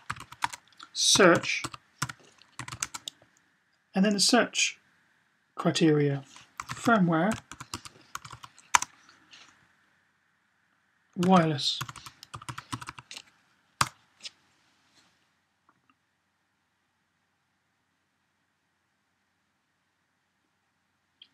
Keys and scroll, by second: 0.0-2.6 typing, 6.5-8.2 typing, 10.8-12.8 typing.